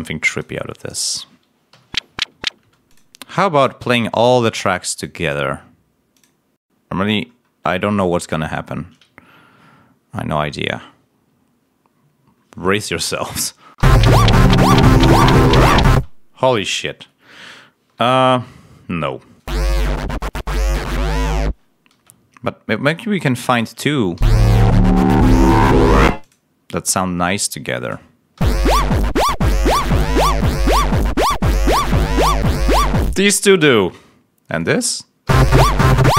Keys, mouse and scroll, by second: 0.4 click, 1.6 l, 2.5 space, 2.8 click, 3.9 scroll up 1, 5.2 scroll up 1, 6.5 scroll up 2, 7.2-7.5 scroll down 2, 10.1-10.6 scroll up 2, 13.6 l, 15.9 space, 17.4 ctrl+scroll down 2, 18.2-18.5 ctrl+scroll up 3, 19.3 space, 21.8 space, 22.3 scroll down 2, 23.4 click, 24.1 l, 26.0 space, 26.1 click, 26.8 scroll down 2, 28.3 l, 33.0 space, 34.5 click, 35.2 l.